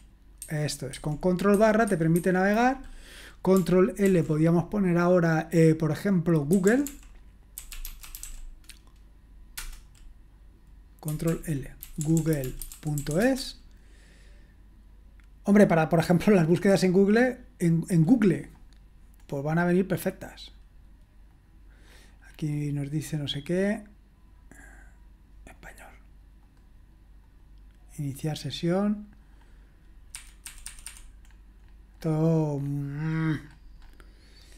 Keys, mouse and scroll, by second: 0.4 ctrl+\, 0.9-4.0 ctrl+\, 6.3-8.7 typing, 9.5 Return, 11.3 ctrl+l, 11.6-13.6 typing, 19.2-20.2 scroll down 1, 20.2 click, 21.3 click, 21.9-23.5 scroll up 1, 23.5 click, 25.5 click, 26.5 click, 27.3 click, 28.4 click, 29.3 click, 30.1 Escape, 30.4 Escape, 30.6 Escape, 30.8 Escape, 31.2-32.0 scroll up 2, 32.0-33.4 scroll down 1, 33.4-34.5 scroll up 1.